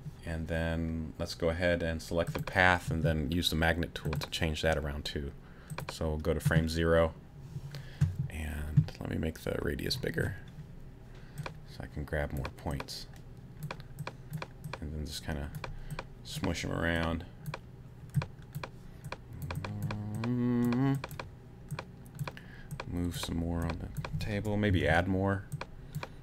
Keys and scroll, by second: 24.7 a.